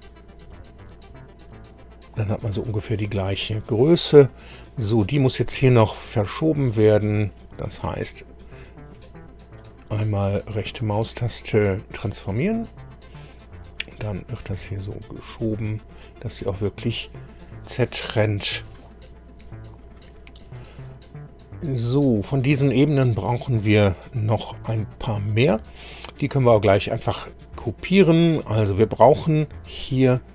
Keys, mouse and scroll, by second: 0.5-4.8 middle drag, 6.6 click, 7.8 right click, 9.6 click, 10.7 right click, 12.3 click, 14.5-16.6 drag, 19.8 click, 20.9-22.1 middle drag, 22.3-25.4 middle drag.